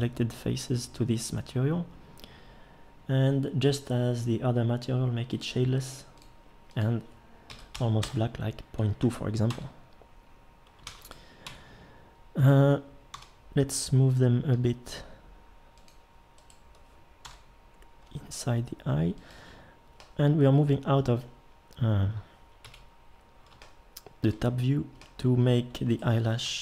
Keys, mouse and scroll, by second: 9.5 Tab, 10.9 ctrl+s, 11.5 Tab, 13.1 l, 14.5 g, 17.2 l, 18.1 g, 22.6 KP_Decimal.